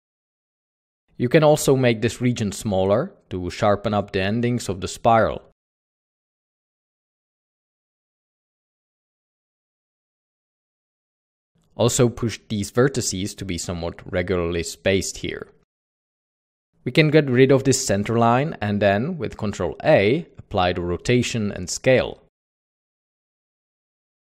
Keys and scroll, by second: 0.0-1.1 typing, 2.5-4.7 typing, 6.0 Tab, 6.4 typing, 7.0 Tab, 7.2 Tab, 7.6 Tab, 7.8 typing, 9.7-11.9 typing, 12.9-13.5 typing, 14.8-15.5 typing, 15.2 Tab, 16.4 ctrl+s, 17.2 ctrl+ě, 17.5 typing, 20.9-21.7 typing.